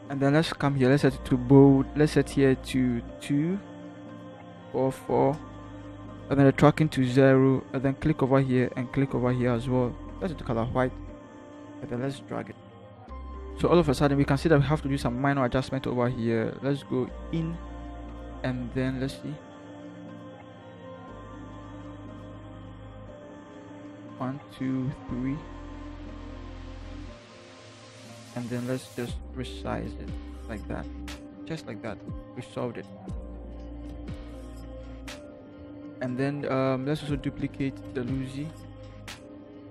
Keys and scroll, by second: 4.2 2, 4.7 4, 4.9 4, 5.3 Return, 11.6 v, 13.2 Up, 13.2 typing, 26.1 ctrl+t, 32.0 Return, 38.5 ctrl+j.